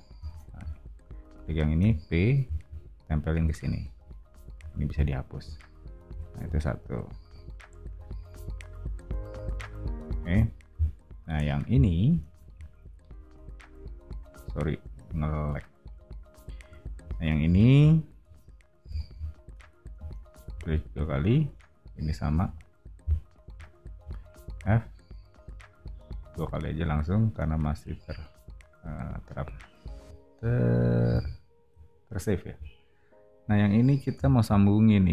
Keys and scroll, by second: 0.0-0.2 typing, 1.8 p, 4.5 e, 6.0 o, 17.4 o, 19.9 space, 20.0 space, 24.5 f, 29.3 o, 34.1 l.